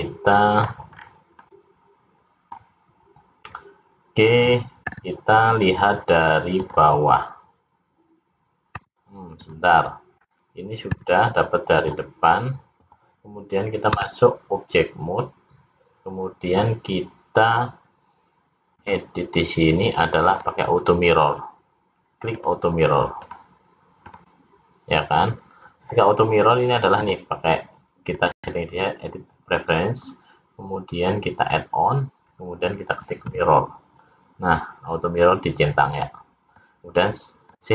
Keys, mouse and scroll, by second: 0.0 middle click, 1.1-1.4 scroll down 2, 1.5 middle click, 10.2 scroll down 1, 11.0 `, 14.0 Tab, 18.8 click, 20.3 click, 22.4 click, 23.2 click, 24.1 click, 27.0 click.